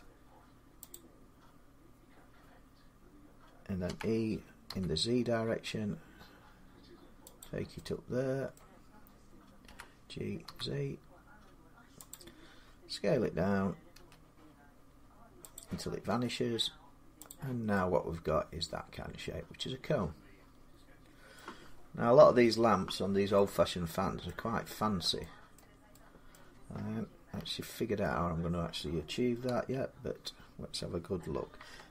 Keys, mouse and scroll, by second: 0.7 click, 3.4-5.8 drag, 3.7-4.5 typing, 7.2 click, 8.4 middle click, 9.2-10.3 typing, 11.8 z, 11.9 click, 13.8 s, 15.2-17.8 drag, 15.2 g, 15.9 s, 21.2 middle click, 21.6-22.1 scroll up 3, 22.3-23.2 scroll, 24.1 middle click, 25.4 middle click, 25.5 middle click, 26.1 middle click, 27.2 4, 29.3 7, 29.5-31.3 middle drag.